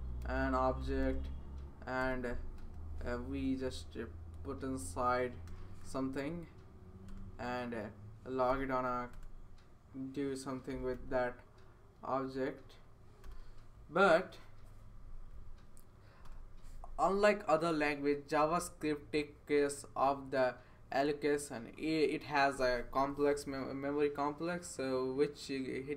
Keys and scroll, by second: 0.0-3.0 typing, 4.1 Down, 4.8 Left, 5.4 BackSpace, 6.1 Right, 7.6 Return, 8.5 typing, 9.1 Return, 10.0-13.7 typing, 13.2 Return, 16.2 Return.